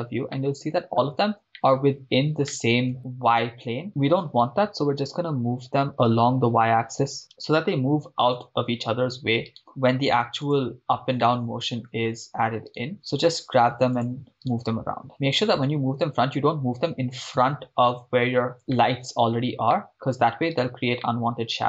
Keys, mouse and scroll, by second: 0.5-1.0 middle drag, 1.1 scroll up 2, 1.5 shift+middle click, 1.8 scroll up 2, 2.5-3.0 middle drag, 3.0 scroll down 4, 3.9 right click, 4.2 g, 5.9 y, 6.9 click, 7.2 right click, 7.3 g, 7.6 y, 8.4 click, 10.4 drag, 11.3-12.1 middle drag, 12.9 right click, 12.9 g, 13.0 y, 14.0-14.8 drag, 14.5 right click, 18.6 click, 18.8-20.1 shift+middle drag, 20.6 right drag, 21.1 middle click.